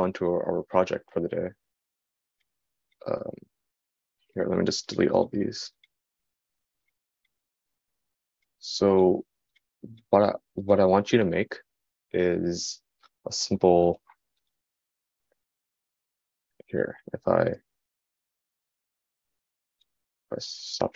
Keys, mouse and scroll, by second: 10.9 x.